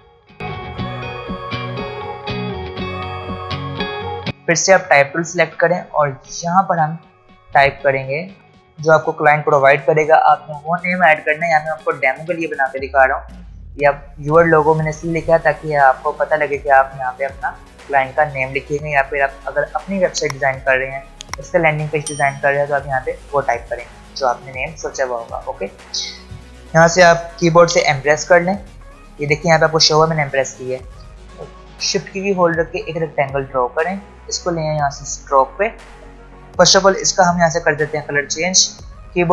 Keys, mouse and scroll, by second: 0.6 shift+h, 0.8 Home, 0.9 click, 1.3-1.6 alt+scroll down 2, 1.6 alt+click, 1.9 typing, 2.2 alt+click, 2.5 ctrl+z, 2.6 click, 2.9 alt+click, 3.4 typing, 3.5 click, 3.6 scroll down 1, 3.7 click, 4.4 t, 8.1-8.8 typing, 27.7 m, 32.0-37.0 shift+drag, 37.0 i.